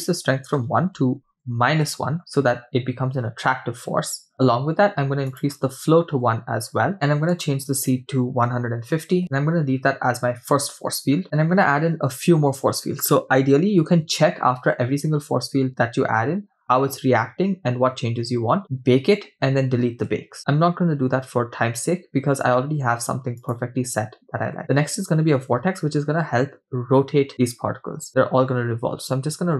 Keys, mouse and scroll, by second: 5.3-6.9 drag, 7.3-9.2 drag, 9.2-9.5 scroll up 5, 15.6-17.5 scroll down 4, 20.2 shift+a, 28.0 r.